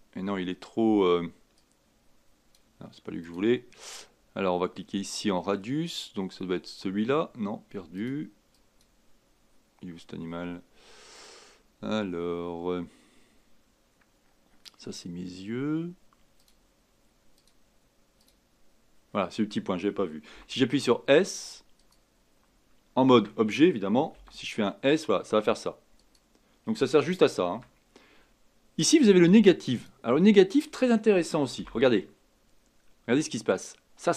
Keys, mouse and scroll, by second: 1.6-3.3 drag, 6.6 click, 7.9 click, 8.5 click, 10.6 scroll down 2, 10.9-11.6 scroll up 1, 11.6 scroll down 2, 16.4 click, 17.3 click, 18.2 click, 20.3 s, 21.8 click, 23.1 Tab, 24.1 s, 27.4 ctrl+z, 28.3 Tab, 29.6 click, 31.6 g.